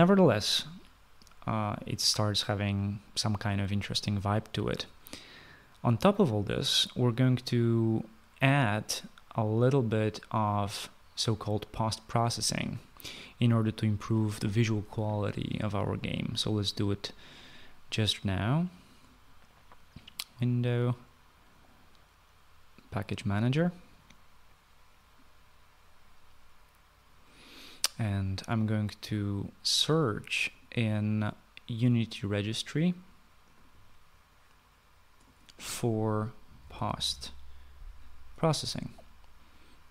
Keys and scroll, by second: 36.3-37.6 typing.